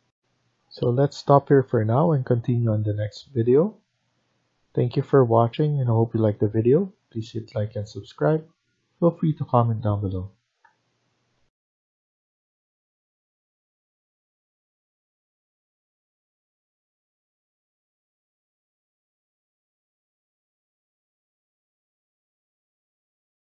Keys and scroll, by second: 11.3 F1.